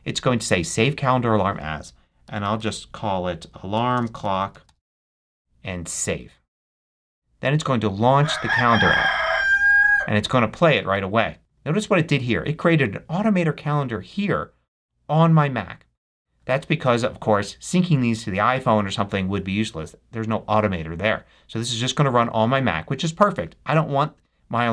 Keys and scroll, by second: 2.1-5.2 typing.